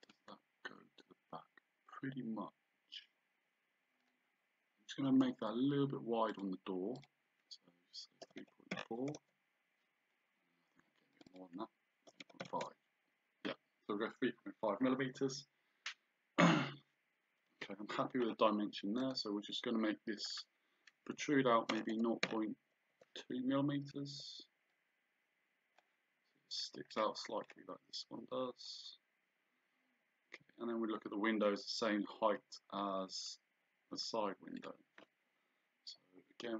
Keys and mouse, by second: 4.0 click, 6.3 click, 8.3 KP_3, 11.2 click, 12.1 KP_3, 12.7 KP_Enter, 17.5 Escape, 19.0 right click, 20.4 click, 21.7 KP_0, 24.7 click, 27.0 click, 27.7 click, 34.6 click.